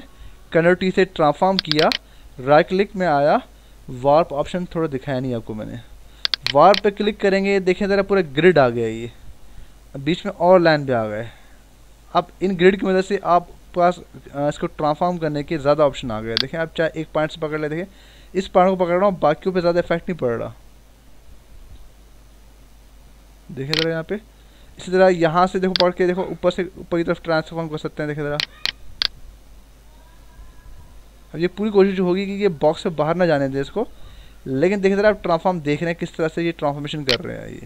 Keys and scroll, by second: 0.6 ctrl+t, 8.1 ctrl+=, 24.7 ctrl+z.